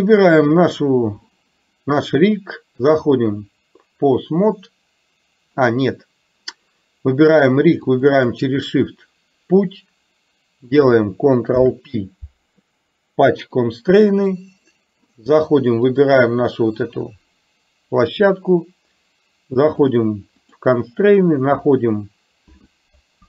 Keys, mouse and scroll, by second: 0.5 click, 3.0-5.6 drag, 11.6 ctrl+p, 19.8 click, 20.5 click.